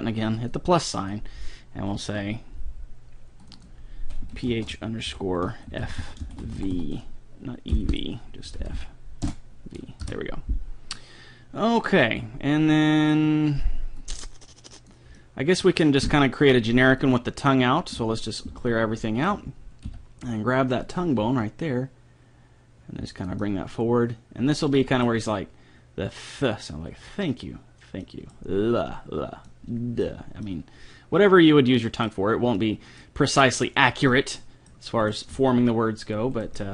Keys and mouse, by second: 0.4-2.2 drag, 3.4-5.4 drag, 6.0 f, 6.8 e, 8.6 Left, 8.8 Left, 10.9 middle click, 12.3 middle click, 14.0-15.8 drag, 15.2-17.0 middle drag, 15.2 right click, 17.0-18.8 drag, 18.5 alt+g, 19.0-20.8 middle drag, 19.8 KP_3, 20.8-22.8 right drag, 21.2 g, 23.4 click, 25.0-29.0 middle drag, 29.2-31.4 middle drag, 31.6 middle click, 31.8 middle click, 35.2-36.6 right drag, 35.4 g.